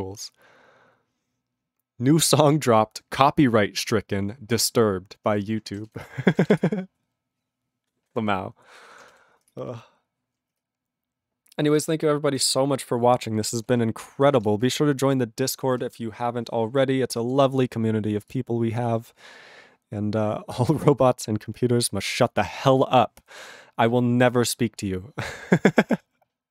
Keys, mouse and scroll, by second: 6.0 Return, 6.6 Return, 9.5 Return, 13.8 Return, 14.3 ctrl+s.